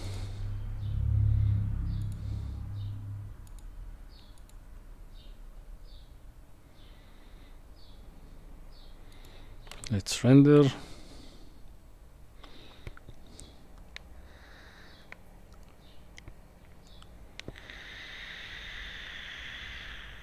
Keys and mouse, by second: 0.0 click, 2.0 click, 3.5 drag, 9.2-10.6 drag, 12.2 F12.